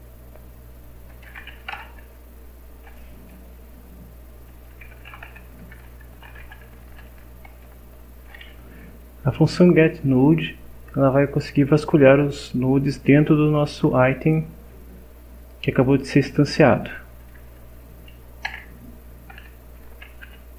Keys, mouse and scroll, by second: 1.0-2.2 typing, 3.3 BackSpace, 4.5-7.5 typing, 17.2 Down, 17.9 Up, 18.5 Return, 19.8 shift+0, 20.2 shift+..